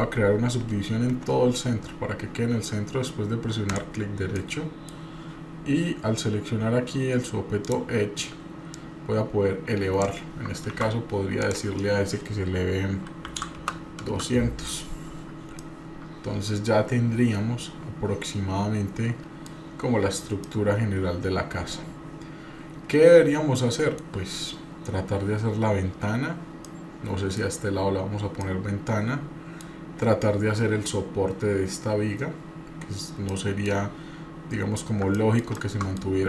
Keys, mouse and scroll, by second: 4.4 middle click, 7.6 click, 8.7-10.1 drag, 10.7 ctrl+z, 11.4-14.7 drag, 13.5 KP_0, 15.6-19.5 middle drag, 20.5-24.1 middle drag, 26.6 middle click, 28.4-29.7 middle drag, 33.3 middle click, 33.9-34.7 scroll up 1, 34.7-35.1 scroll up 2, 35.1 middle click, 35.6 middle click.